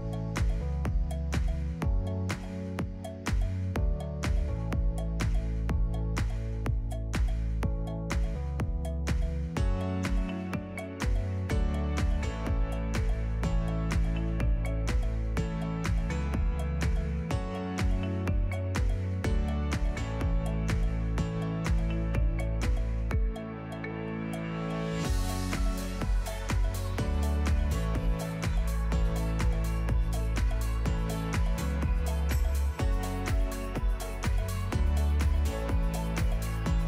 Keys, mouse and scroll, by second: 0.0 click, 1.2 alt+d, 1.4 click, 1.4 s, 1.6 g, 2.0 shift+], 2.1 alt+d, 2.9 click, 3.2 s, 3.6 shift+click, 3.7 g, 5.0 click, 5.1 g, 6.1 shift+right click, 6.2 shift+a, 7.2 click, 7.5 Tab, 7.7-10.5 typing, 8.3-8.6 scroll down 10, 9.0 ctrl+r, 10.0 middle click, 10.1 middle click, 10.3 middle click, 10.4 scroll down 5, 10.5 alt+click, 10.6 middle click, 10.7 ctrl+b, 11.1 ctrl+z, 11.3 alt+click, 11.4 ctrl+b, 12.1 alt+click, 12.2 ctrl+b, 12.6 middle click, 12.7 alt+click, 12.8 ctrl+b, 13.1-15.3 typing, 13.3 alt+click, 14.7 middle click, 15.3 alt+click, 15.5 ctrl+b, 15.9 Tab, 16.0 right click, 16.2 middle click, 16.4-16.7 scroll down 1, 16.7-18.0 drag, 18.2 scroll up 3, 18.2 middle click, 18.8 ctrl+2, 19.0 ctrl+s, 19.1 middle click, 19.2 Tab, 19.3 middle click, 19.4 ctrl+r, 19.7 ctrl+s, 19.9 middle click, 20.0 Tab, 20.6 click, 20.7 Tab, 20.8 middle click, 20.8-22.5 typing, 20.9 click, 21.3 KP_Add, 21.9 Tab, 21.9 click, 22.0 Tab, 22.1 middle click, 22.2 alt+click, 22.6 ctrl+b, 23.3 ctrl+z, 23.4 ctrl+r, 23.7 3, 24.0 KP_Divide, 24.2 KP_Divide, 24.3 middle click, 24.4 scroll down 3, 24.5 middle click, 24.6 x, 24.8 click, 25.1 2, 25.1 click, 25.2 ctrl+click, 25.8 ctrl+f, 26.6 ctrl+e, 27.4 ctrl+f, 27.9 middle click, 28.2 scroll up 1, 28.3 ctrl+z, 28.4 middle click, 28.9 click, 29.5 shift+click, 29.8 click, 29.9 ctrl+click, 30.2 shift+click, 30.3 ctrl+click, 30.6 ctrl+f, 31.0 right click, 31.6 ctrl+z, 31.8 1, 32.4 right click, 32.9 Tab, 33.0 middle click, 33.1 Tab, 33.2 1, 34.0-34.4 drag, 34.8-35.6 drag, 35.8-36.3 drag.